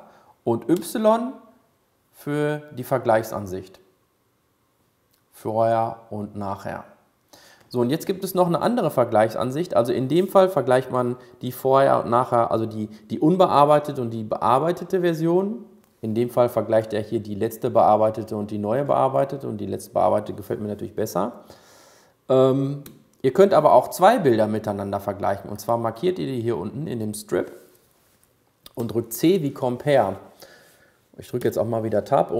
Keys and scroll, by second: 10.9 y, 29.3 c.